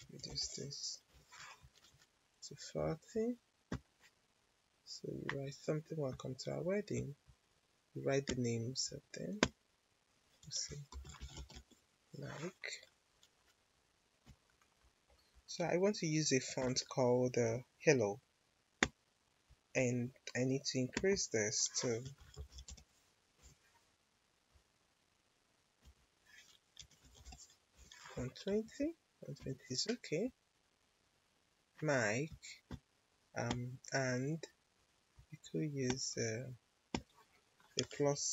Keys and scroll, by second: 0.2 0, 1.0 Return, 10.6-11.9 typing, 22.0 1, 22.4 0, 23.3 Return, 26.5-27.6 typing, 27.7 Return.